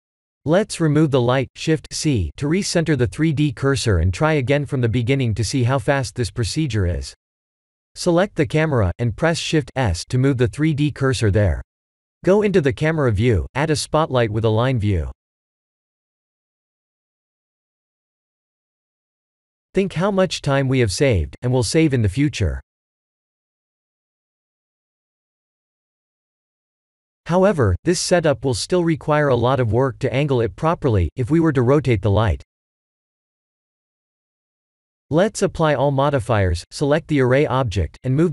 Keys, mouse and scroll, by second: 0.1 middle click, 0.8-1.4 scroll down 4, 1.8 shift+c, 2.8-3.9 scroll up 4, 3.9-4.9 scroll up 2, 6.0 click, 6.9 shift+middle click, 8.7 shift+s, 11.0 KP_0, 15.4 shift+a, 18.1 click, 25.1 click, 27.5 click, 32.5 ctrl+z, 34.4 click, 36.1 ctrl+a, 36.3 ctrl+a, 36.5 ctrl+a, 36.6 ctrl+a.